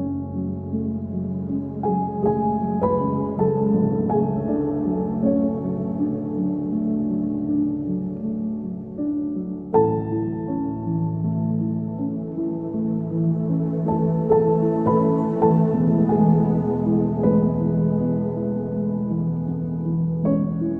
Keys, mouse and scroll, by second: 1.1-1.4 scroll up 2, 2.1 ctrl+s, 3.3 click, 6.6-7.4 drag, 10.0-10.6 drag, 10.9 click, 12.4 click, 13.8-16.6 drag, 16.6-18.7 middle drag, 18.7 click, 20.0 click.